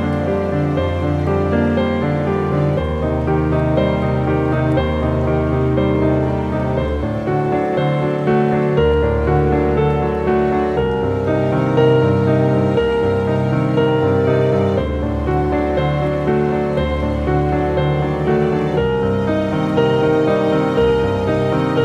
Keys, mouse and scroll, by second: 0.8 click, 4.4 typing, 8.2 click, 12.1 click, 14.2 typing, 14.6 click, 17.7 click, 19.8 typing.